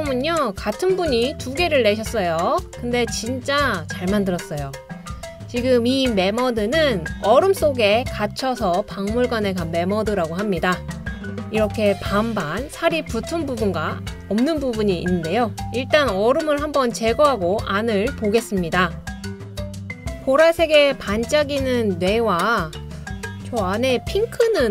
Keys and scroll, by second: 16.7 BackSpace.